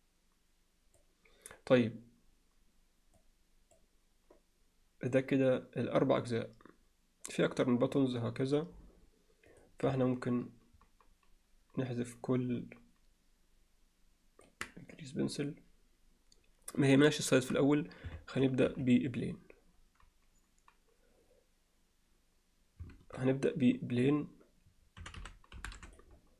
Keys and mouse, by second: 3.2-3.8 drag, 9.6 click, 10.1-14.5 ctrl+drag, 15.0-15.5 drag, 18.2 shift+a, 22.9 shift+a, 25.0 r.